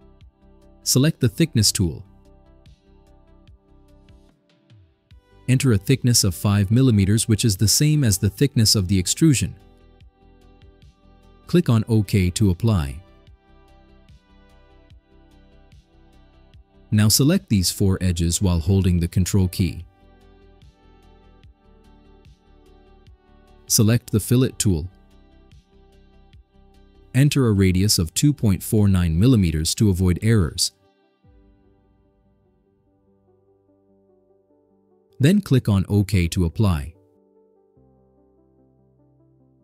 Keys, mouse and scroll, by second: 4.4 click, 7.9 5, 8.2 click, 15.2 click, 18.2 click, 19.2 ctrl+click, 20.4 ctrl+click, 21.3 ctrl+click, 26.2 click, 28.6 2, 29.1 ,, 29.6 4, 30.1 9, 30.9 click, 33.3 middle click, 33.7 middle click, 38.5 click.